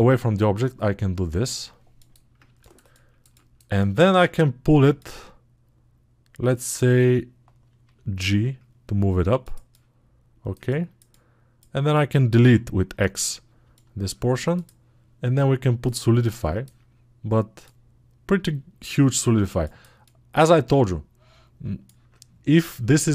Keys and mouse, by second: 15.9 alt+click.